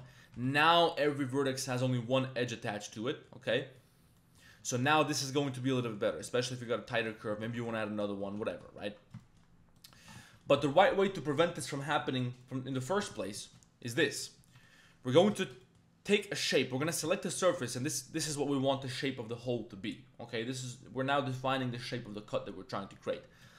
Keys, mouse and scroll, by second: 0.2 1, 0.5 alt+middle click, 2.1 Tab, 2.2-2.9 middle drag, 3.1 middle click, 3.5 Tab, 3.6 click, 4.2 click, 4.5 Tab, 4.6 middle click, 4.9 Tab, 5.1 middle click, 5.7 middle click, 6.1 Tab, 6.2 middle click, 6.5 Tab, 7.0 Tab, 7.1 middle click, 7.3 Tab, 7.5 2, 8.2 Tab, 8.7 ctrl+2, 9.2 shift+drag, 9.8 click, 10.0 Tab, 10.2 shift+click, 10.6 click, 12.4 middle click, 12.7 click, 13.4 shift+click, 13.9 click, 14.1 shift+click, 14.4 3, 14.5 click, 15.4 shift+middle click, 15.6 middle click, 16.1 click, 17.4 ctrl+shift+click, 17.8 middle click, 17.9 click, 22.9 click.